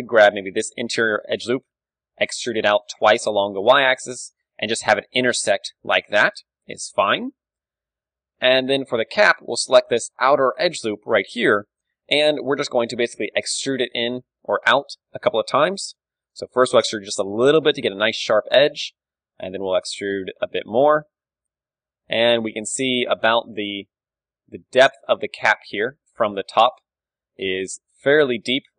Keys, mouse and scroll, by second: 0.1 a, 0.8-2.1 drag, 1.5 e, 2.1 right click, 2.9-5.8 drag, 2.9 e, 4.5 KP_3, 4.8 Tab, 5.8-7.7 middle drag, 8.0 KP_3, 8.3 Tab, 8.9 a, 9.3 right click, 9.7-14.0 middle drag, 11.6 KP_3, 14.3 middle click, 14.9 e, 16.4-18.1 drag, 18.1-20.2 middle drag, 18.6 e, 21.1-22.9 drag, 22.3 KP_7, 22.9-26.5 middle drag, 26.5 click, 27.4 middle click.